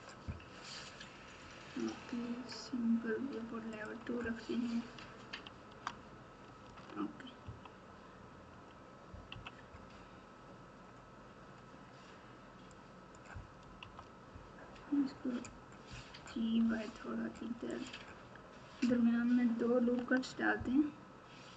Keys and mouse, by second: 2.5 click, 3.8 click, 3.9 Tab, 4.9 Tab, 5.6 Tab, 6.6 alt+z, 7.4 KP_3, 9.3 KP_1, 12.7 click, 13.8 KP_3, 15.8 g, 19.8 ctrl+r.